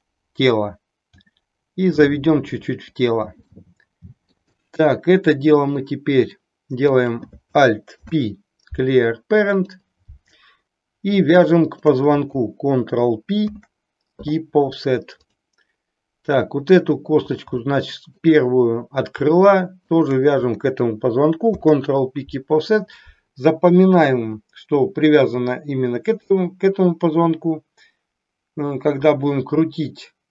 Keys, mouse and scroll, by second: 1.2 g, 2.9 click, 3.6 middle click, 4.6-6.3 middle drag, 6.9 click, 7.9 alt+p, 11.6 shift+click, 13.5 ctrl+p, 17.7 shift+middle click, 21.4 ctrl+p.